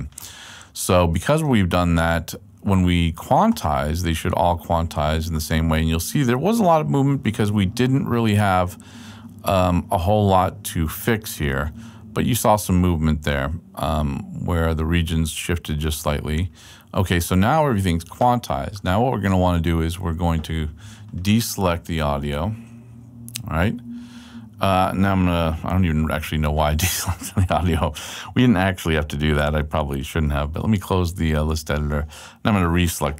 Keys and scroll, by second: 23.2 super+Right, 30.3 d.